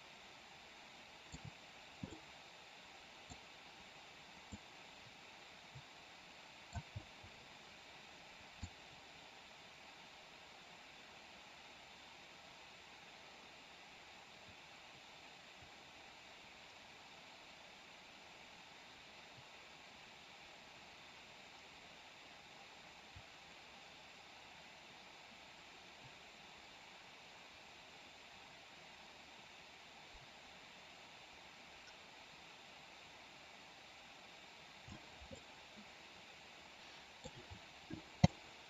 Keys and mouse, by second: 2.0-3.4 middle drag, 4.5-6.7 middle drag, 6.8 space, 8.7-35.0 drag, 35.2-37.2 middle drag, 38.2-38.6 middle drag.